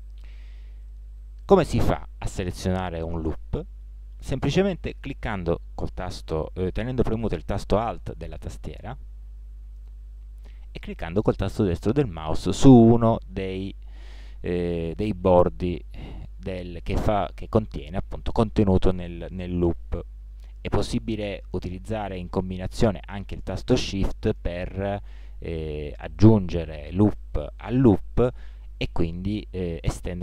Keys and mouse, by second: 1.4-4.3 middle drag, 8.7-13.0 middle drag, 13.7-15.5 middle drag, 21.7-26.2 middle drag.